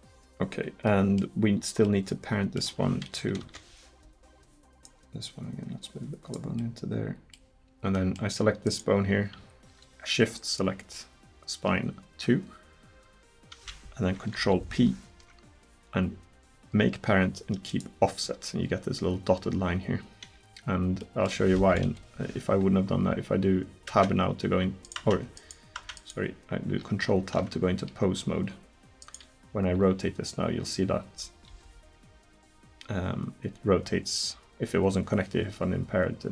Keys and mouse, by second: 2.1-3.4 middle drag, 3.4 KP_7, 6.6 middle click, 8.7 right click, 14.4 ctrl+p, 19.5 middle click, 21.3 click, 21.9 KP_1, 23.9 Tab, 24.9 right click, 25.0 Tab, 25.4 right click, 25.8 Tab, 27.1 ctrl+Tab, 30.0 r.